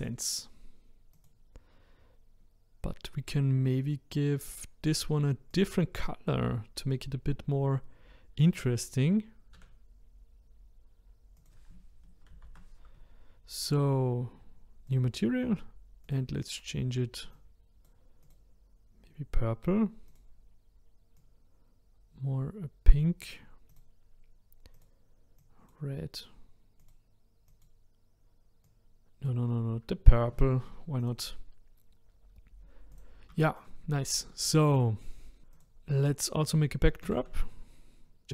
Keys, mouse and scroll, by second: 1.2 click, 5.5 click, 9.5 s, 12.3 ctrl+z, 14.9-16.1 drag, 18.2 click, 20.1 click, 23.7 click, 24.7 click, 26.8 click, 31.0 click, 32.5-33.0 drag, 33.4-35.4 shift+middle drag, 35.5 click, 37.0 shift+a.